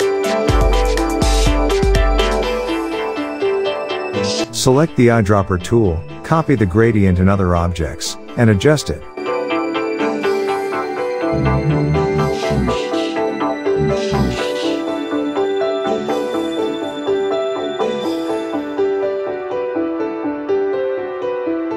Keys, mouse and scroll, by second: 2.7 space, 2.8 click, 8.3 ctrl+shift+], 9.0 click, 10.8 alt+scroll down 1, 11.5-13.9 drag, 18.6 space, 18.7-21.5 drag.